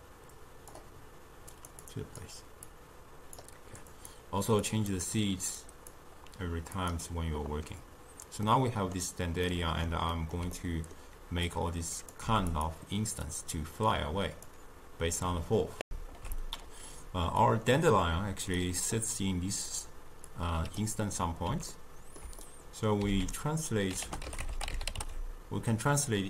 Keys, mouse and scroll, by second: 1.9 click, 4.0 click, 4.7 click, 5.6-6.9 drag, 8.5-11.5 middle drag, 11.5-12.3 drag, 12.3 g, 13.3 click, 15.9 ctrl+alt+shift+q, 17.5 click, 20.3 click, 21.8-23.1 ctrl+middle drag, 23.1 ctrl+a.